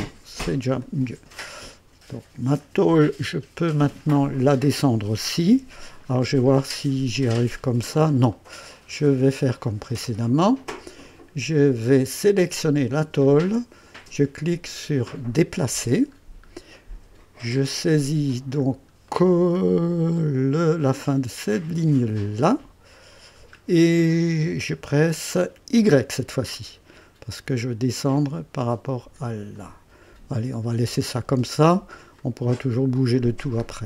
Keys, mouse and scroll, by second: 0.1 click, 0.8-2.7 drag, 5.4-16.3 ctrl+d, 6.0 scroll up 1, 6.5 right click, 7.5 scroll up 1, 8.3 right click, 9.3 scroll up 1, 9.9 right click, 12.9 click, 15.3 click, 16.1 scroll up 1, 16.7 right click, 18.6 scroll up 1, 19.1-19.7 right drag, 19.8 scroll up 1, 22.2 click, 22.8-23.6 scroll down 2, 24.0 right click, 25.7 y, 26.5-26.9 scroll down 1, 29.5 click, 30.4 scroll down 1, 31.0-32.0 right drag, 32.2-33.1 drag, 33.1-33.7 scroll down 2.